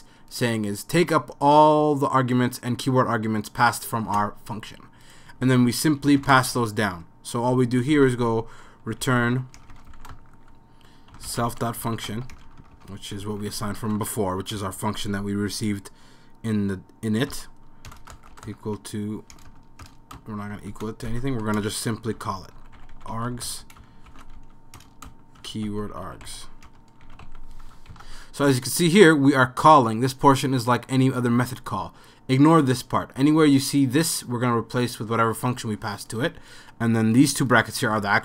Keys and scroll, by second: 6.2 shift+;, 6.3 Return, 7.9-14.4 typing, 15.7-27.6 typing.